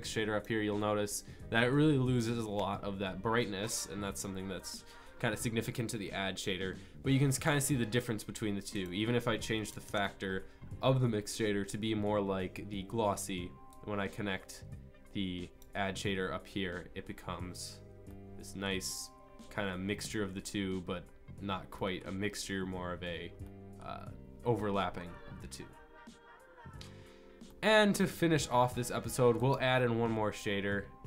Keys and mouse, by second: 18.1-26.2 drag.